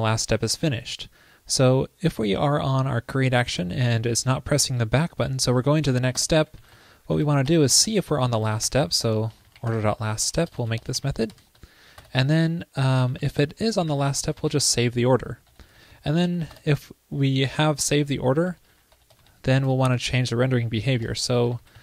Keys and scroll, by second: 16.3 super+Right.